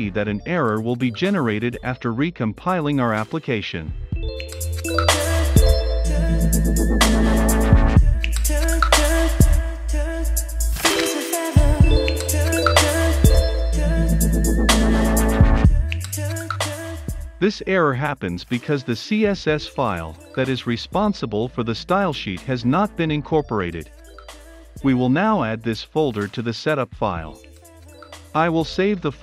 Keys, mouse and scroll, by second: 0.9 ctrl+s, 2.8 click, 4.0 typing, 4.3 Return, 5.1 Up, 6.1 Return, 8.3-22.4 drag, 26.4 <, 26.9 ~, 27.3 Return, 27.6 F12, 28.1 ctrl+s.